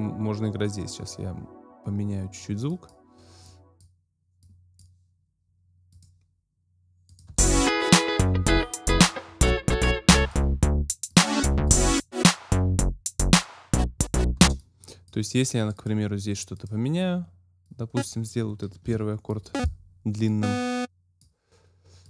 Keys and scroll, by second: 7.3 space, 14.4 space, 18.8 BackSpace.